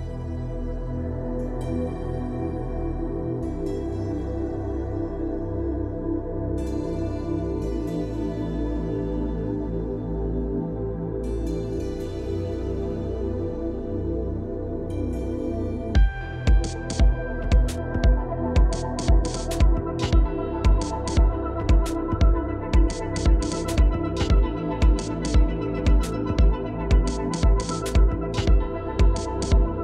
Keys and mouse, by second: 1.3 shift+click, 1.7 Tab, 2.3 shift+click, 2.7 click, 3.5 click, 3.9 shift+click, 5.2 shift+click, 6.2 click, 6.9 shift+click, 7.1 click, 7.8 ctrl+click, 8.6 shift+click, 10.1 click, 10.6 shift+click, 11.6 click, 12.5 shift+drag, 14.2 shift+click, 14.7 shift+click, 15.3 ctrl+click, 15.9-17.0 drag, 17.8 middle click, 19.5 shift+middle click, 20.0 middle click, 20.5 shift+middle click, 20.7 middle click, 21.3 shift+click, 22.1 ctrl+click, 22.8 shift+click, 23.5 shift+click, 24.2 ctrl+click, 24.4 middle click, 24.8 shift+click, 25.4 ctrl+click, 26.0 middle click, 26.7 shift+middle click, 27.1 shift+middle click, 27.7 shift+middle click, 28.8 middle click.